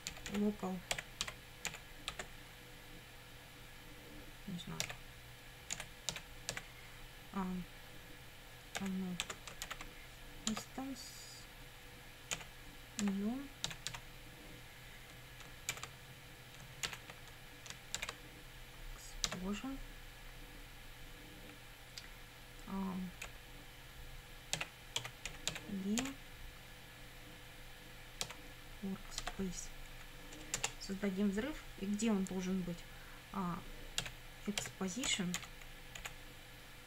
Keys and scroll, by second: 0.0-2.2 typing, 4.8 r, 5.7 BackSpace, 6.1 e, 6.5 x, 8.8 =, 9.2 space, 9.7 shift+i, 10.5 Tab, 12.4-14.4 typing, 15.7 shift+9, 16.9 shift+', 18.0 shift+e, 19.3 Tab, 23.3 ,, 24.3-26.0 typing, 28.2 w, 29.2 Tab, 29.9 Right, 30.6 Return, 34.0-36.0 typing.